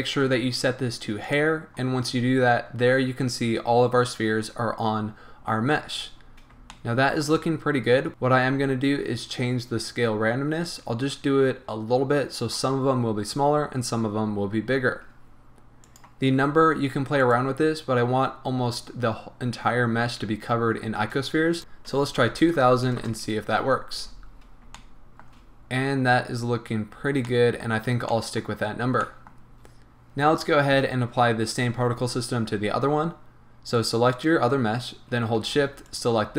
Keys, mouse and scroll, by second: 1.3 click, 5.0 scroll down 1, 5.9 scroll up 1, 6.3-8.1 middle drag, 8.1 right click, 10.7-17.3 drag, 17.3 right click, 21.6-24.7 drag, 21.6 BackSpace, 22.2 KP_0, 23.1 Return, 24.0 a, 24.2 scroll down 1, 24.7-34.1 shift+middle drag, 26.2-27.3 scroll up 2, 34.1 click, 35.9 shift+click.